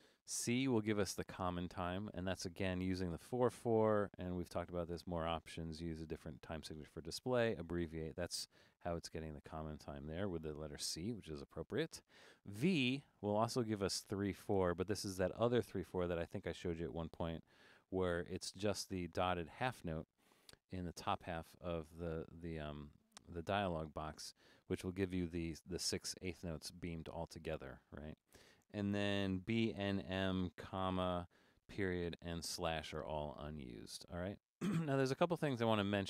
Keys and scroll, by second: 1.1 c, 1.2 c, 12.9 v, 13.4 v.